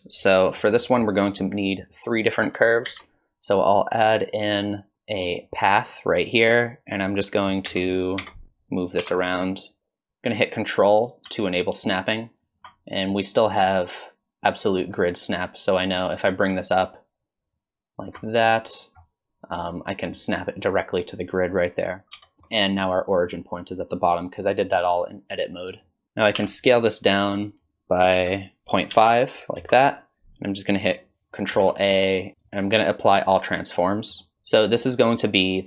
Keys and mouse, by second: 0.8 click, 2.9 shift+a, 7.7 KP_1, 8.2 Tab, 9.0 r, 13.6-15.0 drag, 15.9-18.2 drag, 22.2 Tab, 22.4 shift+click, 25.8 shift+click, 26.4 s, 31.5 ctrl+a.